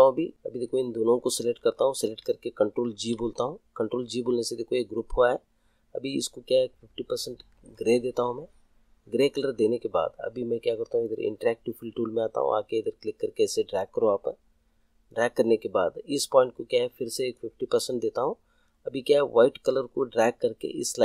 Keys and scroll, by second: 2.9 ctrl+g.